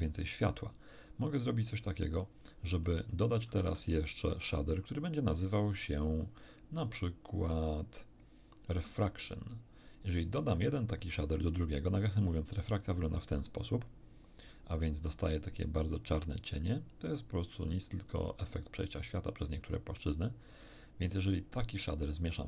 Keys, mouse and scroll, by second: 1.0-2.3 drag, 2.4 middle click, 3.6 shift+a, 8.6 click, 10.0 click, 11.8-13.0 shift+drag, 15.1-16.2 middle drag, 19.8 middle click, 21.4 click.